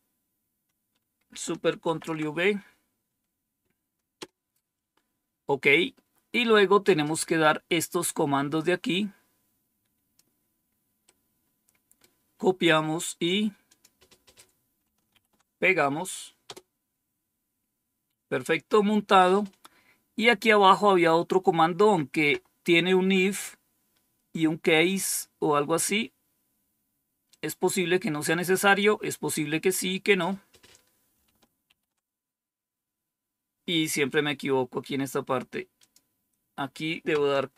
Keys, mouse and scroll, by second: 1.8 ctrl+v, 4.1 Return, 8.7-10.1 drag, 11.0 right click, 13.6 click, 15.0 ctrl+v, 16.4 Return, 20.1-20.8 scroll down 1, 21.2 scroll down 1, 27.2-28.7 drag, 31.6 ctrl+c, 35.7 click, 37.4 ctrl+c.